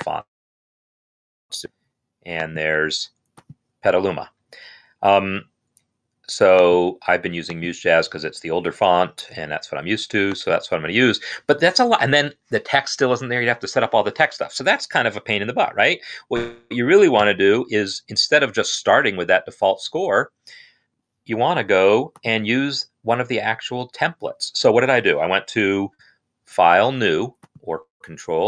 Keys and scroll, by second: 16.6 ctrl+n, 24.3 Escape.